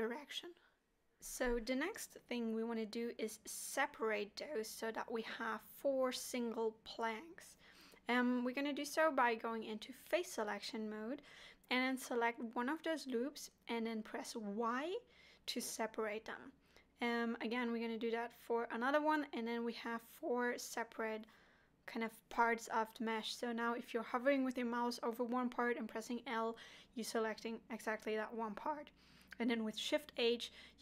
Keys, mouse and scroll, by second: 1.1 k, 2.9 middle click, 3.6 middle click, 6.0 2, 6.4 middle click, 7.7 alt+click, 9.3 3, 9.8 alt+click, 10.4 middle click, 12.2 y, 13.1 middle click, 15.5 alt+click, 16.6 y, 18.7 l, 19.4 l, 20.2 alt+a, 22.4 middle click, 24.4 middle click, 25.4 l, 27.1 shift+h, 27.9 middle click, 28.6 scroll up 2, 29.1 2, 29.5 click, 30.5 f.